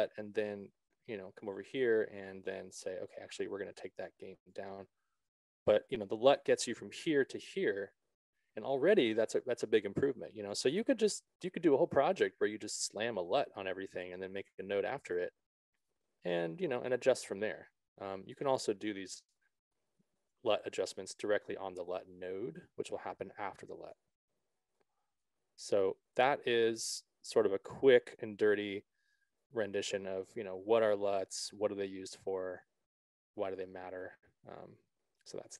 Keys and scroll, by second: 19.7 BackSpace.